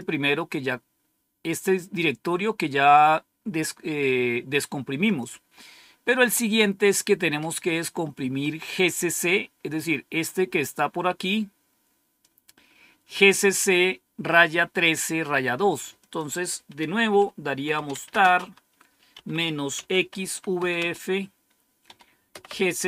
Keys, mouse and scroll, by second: 2.2-2.9 typing, 5.0 click, 9.8-10.4 scroll down 1, 10.4-11.1 scroll down 1, 12.1-13.4 drag, 15.9 click, 17.4-22.8 typing.